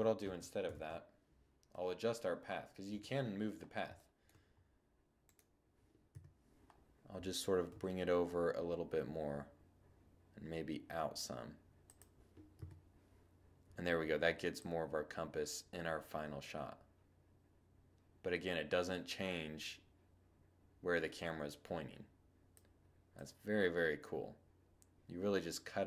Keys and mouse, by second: 0.7 2, 1.1-3.0 middle drag, 1.8 1, 4.2 click, 4.3-5.1 middle drag, 5.1 7, 5.6 right click, 5.8 click, 6.6 g, 10.9-13.1 drag, 11.5 0, 13.5-15.3 drag, 22.0-24.0 drag.